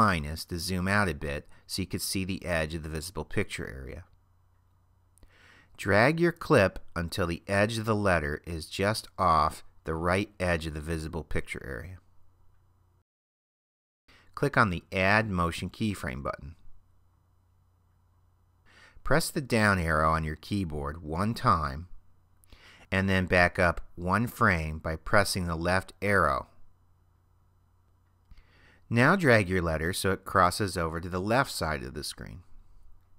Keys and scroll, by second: 0.1 super+-, 19.7 Down, 25.3 Left.